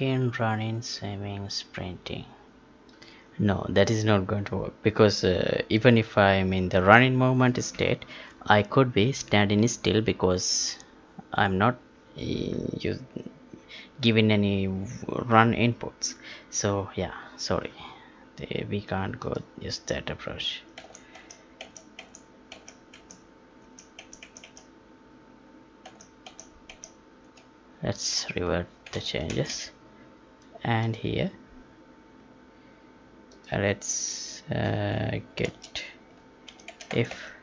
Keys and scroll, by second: 20.7 ctrl+z, 25.8 ctrl+z, 29.3 ctrl+shift+s, 36.9 Tab.